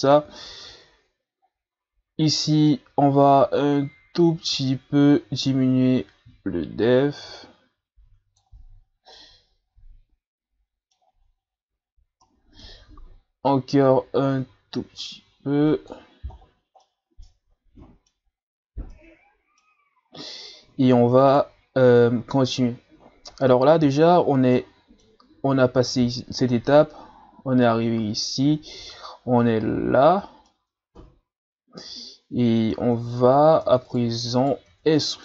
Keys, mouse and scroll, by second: 0.5 Tab, 1.4-2.0 scroll down 4, 2.6-5.7 shift+drag, 9.1-11.0 middle drag, 11.0-11.3 scroll down 1, 12.2-13.4 middle drag, 13.4-16.4 drag, 16.4 scroll down 1, 16.8-18.4 middle drag, 18.4 scroll up 1, 18.9-21.2 middle drag, 21.2 shift+right click, 24.6-27.6 middle drag, 30.5-33.0 middle drag, 33.0 Tab, 33.6 Tab, 33.9 right click, 34.4 right click, 34.7 Tab, 35.0 middle click.